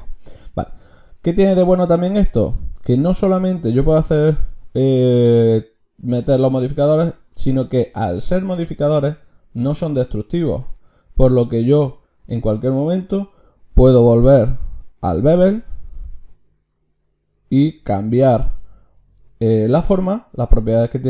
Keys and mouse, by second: 7.5-13.9 drag, 13.9 ctrl+shift+q.